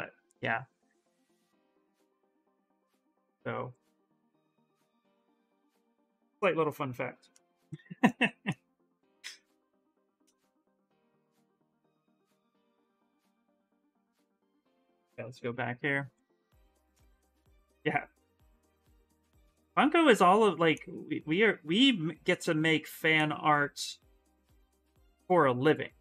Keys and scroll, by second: 14.5-15.7 typing.